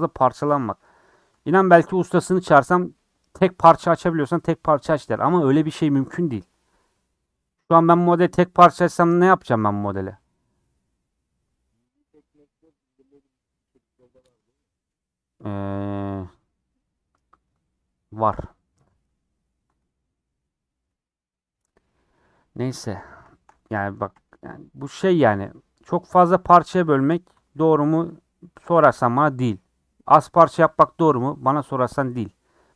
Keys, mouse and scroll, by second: 1.4 3, 2.6 click, 3.9-7.1 middle drag, 7.1-7.5 scroll down 4, 7.3 middle click, 10.2 click, 14.0-19.3 middle drag, 19.3 scroll down 2, 22.6 middle click, 23.0 scroll up 4, 23.3 shift+middle click, 24.1 /.